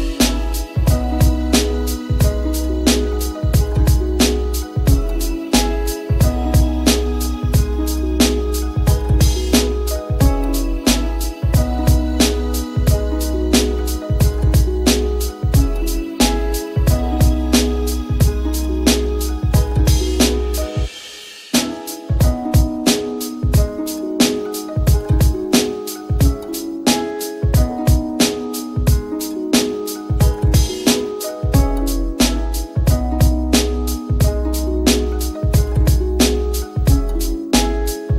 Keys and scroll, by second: 3.0 ], 3.7 [, 27.3 t.